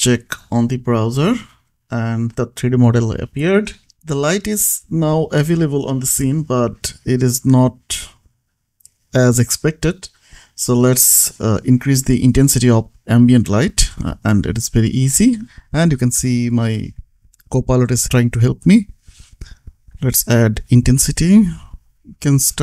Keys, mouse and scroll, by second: 0.2 v, 1.3 ctrl+s, 2.1 click, 4.3 scroll up 1, 4.8 click, 8.5-9.1 scroll down 1, 9.1 click, 9.7-10.5 scroll up 1, 10.5 click, 13.1 click, 13.6 space, 19.7 n, 21.4 t, 22.2 BackSpace, 22.4 click.